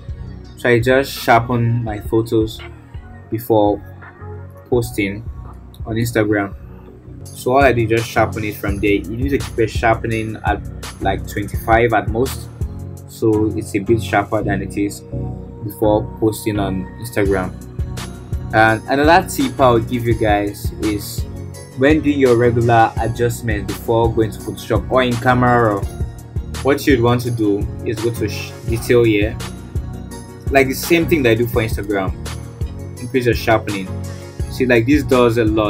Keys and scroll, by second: 5.9 ctrl+j.